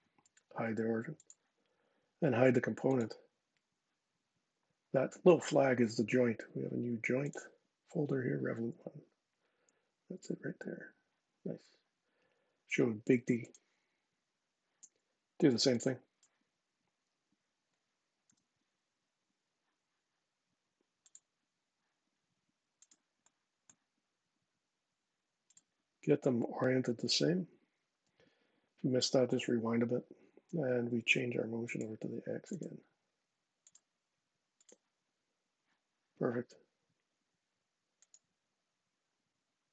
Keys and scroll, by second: 18.0 j.